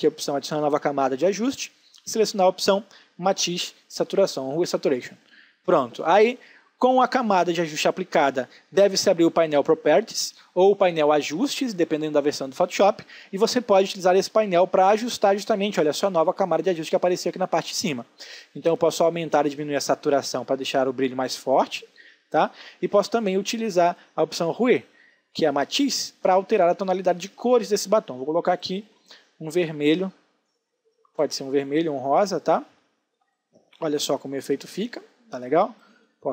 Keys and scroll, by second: 28.0 ctrl+space, 32.1 ctrl+space.